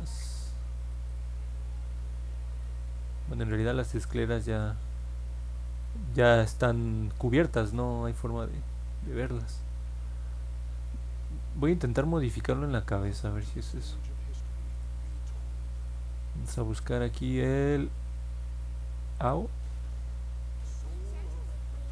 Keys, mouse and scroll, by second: 0.9 click, 6.1 middle click, 8.6 middle click, 8.6 scroll down 1, 9.8 middle click, 10.3 middle click, 10.9 middle click, 11.5 middle click, 12.1 scroll up 1, 12.5 scroll down 1, 14.7 click, 16.3 middle click, 16.5 middle click, 17.3 middle click, 19.1 click.